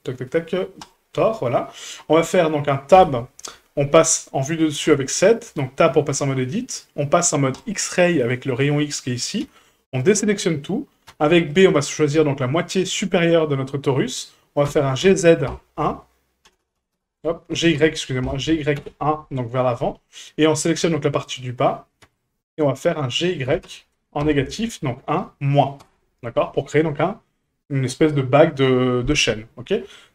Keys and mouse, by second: 1.5 middle drag, 2.9 KP_7, 4.9 n, 5.5 Tab, 7.5 click, 9.4 a, 11.1 b, 14.7 g, 17.5 g, 20.8 a, 22.0 b, 23.4 g, 26.3 Tab.